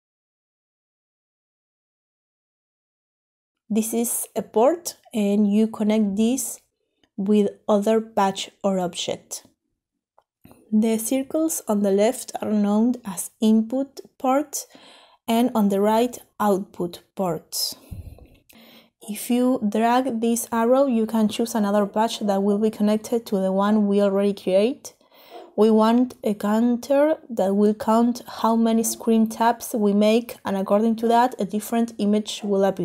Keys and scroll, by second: 7.0 Escape, 12.6-13.3 typing.